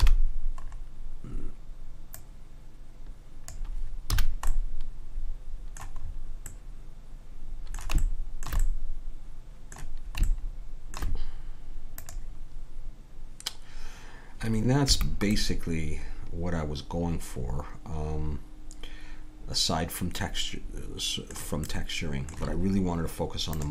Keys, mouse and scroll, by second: 0.0 KP_1, 2.2-3.6 right drag, 3.6 click, 4.3 a, 4.6-6.8 middle drag, 12.0 click, 14.9 Escape, 15.4-17.0 middle drag, 21.7-23.6 middle drag, 23.6 click.